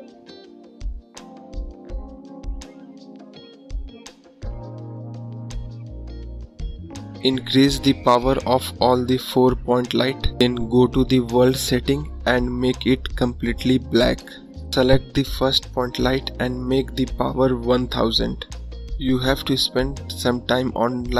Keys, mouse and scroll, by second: 4.4 click, 6.0 scroll up 1, 6.2 scroll down 2, 6.5 scroll up 1, 6.9 click, 7.7 KP_0, 9.2 click, 9.6 KP_0, 10.4 click, 10.9 KP_0, 11.8 click, 12.3 KP_0, 14.9 click, 17.5 click, 20.7 click.